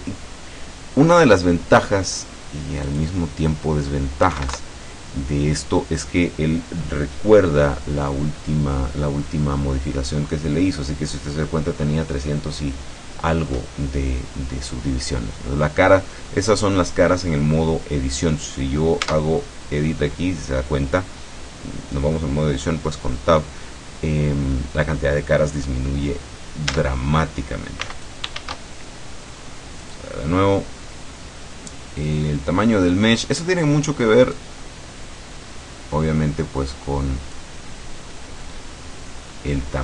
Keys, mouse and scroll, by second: 3.0 click, 4.3 KP_6, 4.6 KP_Enter, 19.1 Tab, 26.8 Tab, 27.8 x, 28.0 click, 28.4 shift+a, 29.8 click, 34.4-37.6 drag, 37.6-38.3 scroll down 2, 38.3-38.6 scroll down 1, 38.6-39.0 scroll up 2, 39.0-39.6 scroll down 2, 39.7-39.8 scroll up 4.